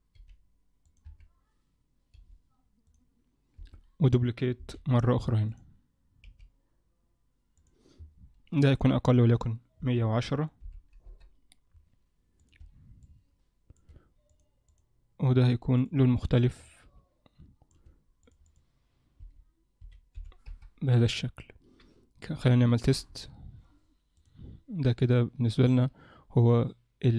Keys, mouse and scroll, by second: 0.1 g, 1.1 KP_1, 2.1 g, 3.6 KP_7, 4.7 shift+d, 6.3 r, 8.7 click, 12.4 click, 14.3 click, 15.8 click, 18.5 click, 22.9 KP_0, 25.8 click.